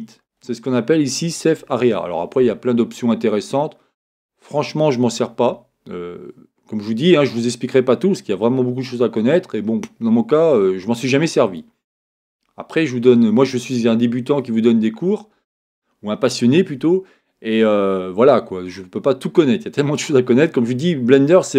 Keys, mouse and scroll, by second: 4.1-5.9 drag, 12.9 click.